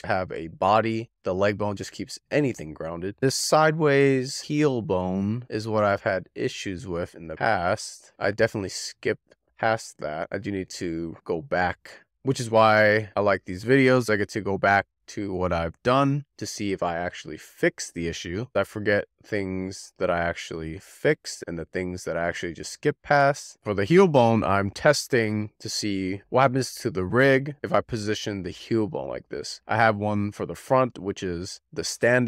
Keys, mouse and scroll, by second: 0.0 scroll down 2, 0.2 click, 0.5 click, 0.7 click, 0.9 alt+middle click, 1.2 scroll up 3, 1.4 click, 1.6 click, 1.8 click, 2.1 alt+middle click, 2.2 scroll down 2, 2.3 shift+middle click, 2.5 click, 3.1 e, 4.3 click, 6.8 z, 8.0 w, 8.5-11.8 middle drag, 17.1 click, 18.9-22.0 middle drag, 23.7 click, 23.9 middle click, 24.3 click, 24.6 middle click, 25.1 click, 25.5 middle click, 25.7 click, 25.9 shift+middle click, 26.7 click, 26.8 click, 27.0 click, 27.0 middle click, 27.3 click, 27.4 click, 27.6 middle click, 27.8 click, 27.9 click, 28.1 middle click, 28.6 click, 28.9 middle click, 29.3-32.2 shift+middle drag.